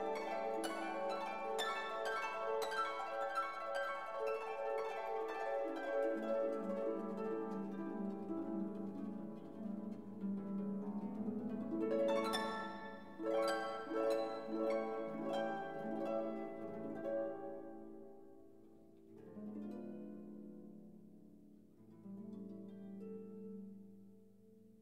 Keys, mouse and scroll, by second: 0.7-1.8 drag, 2.7 click, 4.1 click, 5.0 click, 6.3 click, 7.4 click, 9.3 click, 10.9 click, 12.6 click, 13.8 click, 16.1 click, 18.3 click, 19.5 click, 19.8 click, 20.3-24.0 drag, 24.0 0.